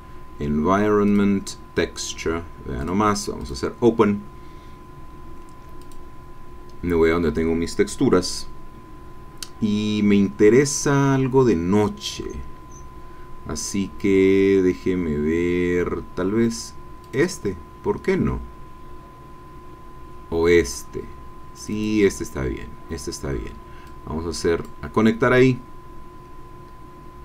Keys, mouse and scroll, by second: 1.0 click, 2.8 click, 3.4 click, 5.9 click, 11.8-12.5 scroll down 2, 12.6-13.5 scroll down 4, 13.8-15.4 scroll down 4, 15.4-15.7 scroll down 1, 17.0 click, 19.5-20.0 scroll down 2, 21.5 click, 23.8-26.9 drag.